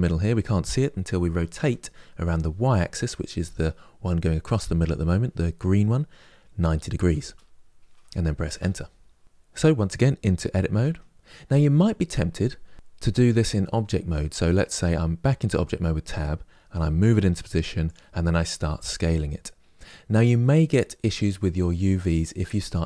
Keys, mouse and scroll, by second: 1.3 r, 10.5 Tab, 15.0 Tab, 16.6 g, 18.5 s.